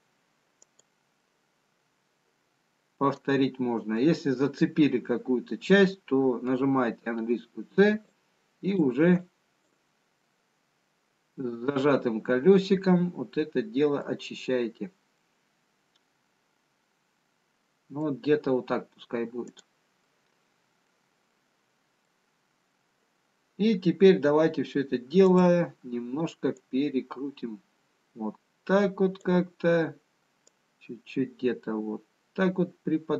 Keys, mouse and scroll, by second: 1.4 middle click, 8.0 c, 20.2 middle click, 22.4 middle click, 22.4-24.3 scroll down 1, 26.1 click, 28.1 click, 32.7 click.